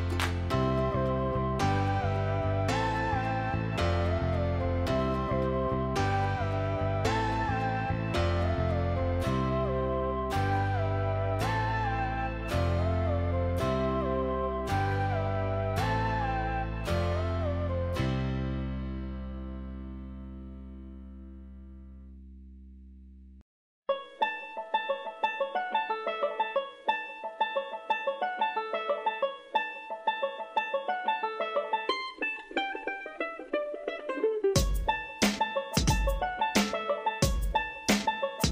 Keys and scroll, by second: 24.3 ctrl+t, 35.7 ctrl+t.